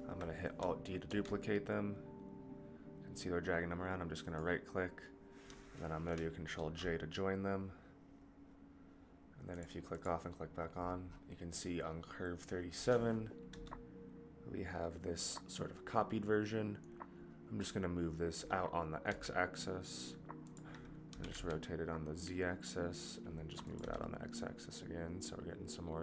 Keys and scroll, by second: 1.3 alt+d, 6.7 ctrl+j, 13.5 g, 21.1 r, 23.8 g.